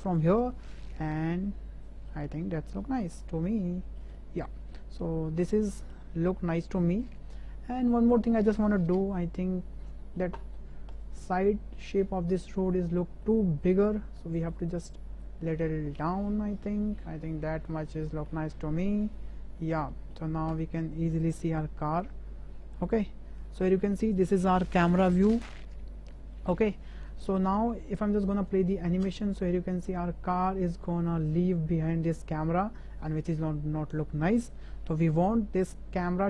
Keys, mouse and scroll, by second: 0.0 click, 0.8-1.5 shift+drag, 1.5-2.1 shift+middle drag, 2.7 ctrl+middle click, 3.2-3.9 middle drag, 4.2-4.7 shift+drag, 5.0-5.4 drag, 5.4-5.9 middle drag, 6.1 ctrl+click, 9.2 KP_0, 9.9 middle drag, 10.4 shift+middle drag, 11.0 click, 11.4 Tab, 12.1 middle click, 12.9 shift+click, 13.4 click, 14.2 middle click, 15.2-18.0 drag, 18.4 middle click, 19.2 Tab, 19.6 middle drag, 19.9 shift+middle click, 20.5 KP_0, 21.9-22.7 shift+drag, 23.0-23.9 shift+drag, 29.0 space, 31.8 space, 33.1-34.4 drag.